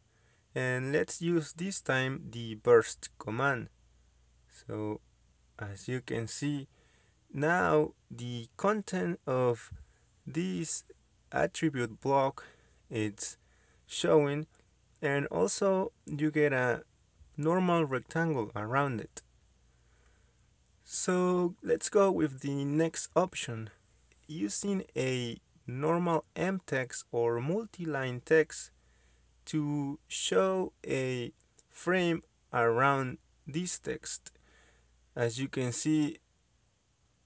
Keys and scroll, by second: 3.4-4.5 typing, 5.5 Return, 7.6 Return, 13.0 Escape, 15.4 Escape, 16.3 ctrl+z, 16.7 ctrl+z, 18.5 m, 18.7 space, 20.2-21.4 typing, 21.5 Return, 27.5 Escape, 31.1 m, 31.2 space, 34.3 Escape.